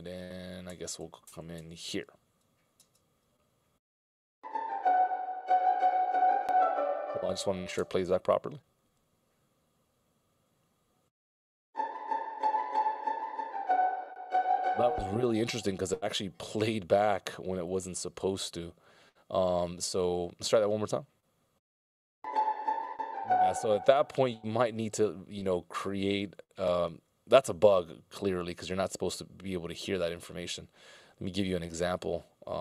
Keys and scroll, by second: 0.2 ctrl+alt+Left, 0.6 ctrl+alt+Right, 0.9 ctrl+alt+Left, 1.5 ctrl+alt+Left, 2.8 alt+space, 5.7 space, 8.0 space, 13.3 space, 16.9 super+f, 20.5 space, 27.5 a.